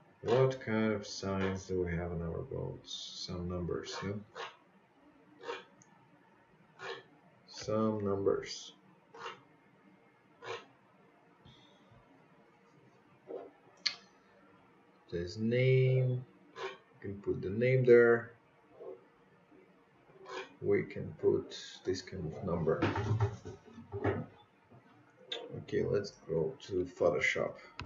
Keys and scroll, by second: 26.2-27.1 typing.